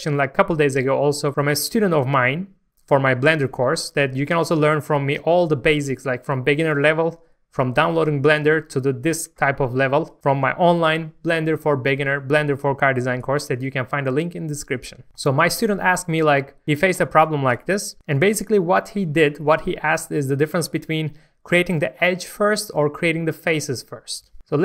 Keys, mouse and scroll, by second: 6.0 scroll down 1, 6.3 shift+middle click, 9.0-9.6 scroll down 1, 16.3 scroll up 1, 18.3 shift+middle click, 19.2 scroll up 1, 19.6 shift+middle click.